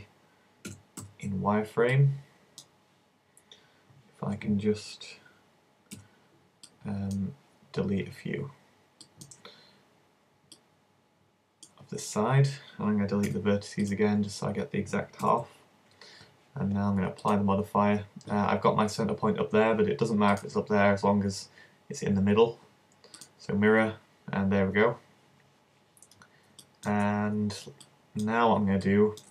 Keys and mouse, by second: 0.7 z, 1.0 b, 6.0 c, 13.3 x, 15.3 z, 17.3-19.1 drag, 20.5-22.3 drag.